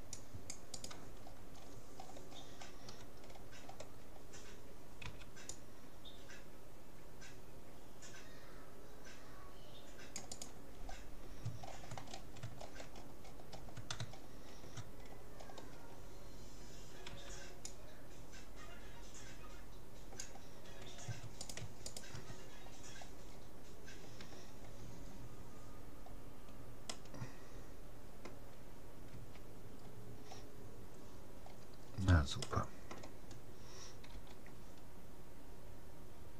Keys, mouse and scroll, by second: 0.9-2.5 right drag, 1.3-5.9 middle drag, 5.1 c, 10.5-17.7 middle drag, 11.5 right click, 11.7 click, 17.1 c, 21.5-23.5 right drag, 22.6-23.9 middle drag, 25.1 middle click, 25.3-26.7 scroll up 1, 26.9-29.1 middle drag, 29.1 a, 29.9 middle click, 31.5-32.3 scroll up 1, 32.5-34.1 middle drag, 34.1 g.